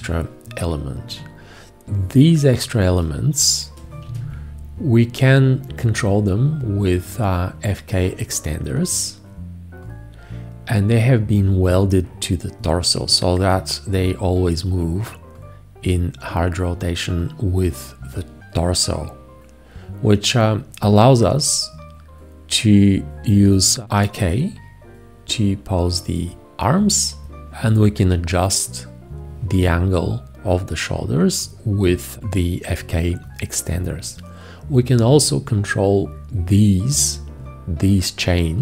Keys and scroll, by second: 4.1 g.